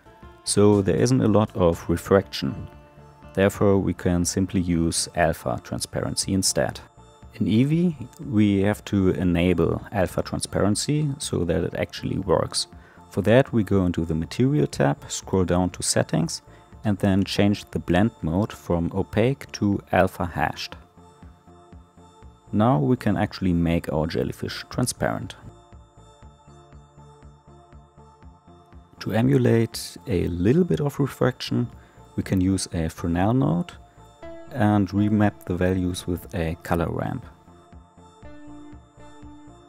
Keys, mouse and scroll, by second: 0.0 l, 5.6-8.5 drag, 15.2 click, 20.0-25.7 drag, 36.3-38.6 drag, 38.6-39.6 scroll up 1.